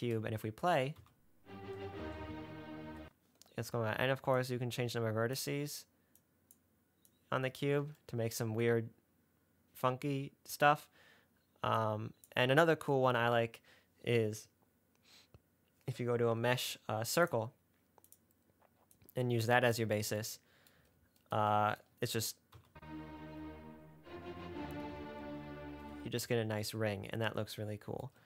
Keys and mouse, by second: 1.2 space, 3.1 space, 4.8 click, 6.4 click, 7.4 click, 12.2 click, 13.5 shift+a, 19.3-20.1 drag, 22.8 space, 25.8 space.